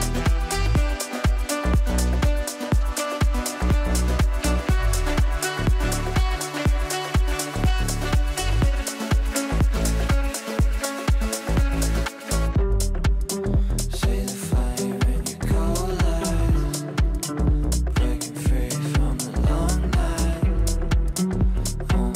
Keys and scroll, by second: 6.3 space, 7.5 g.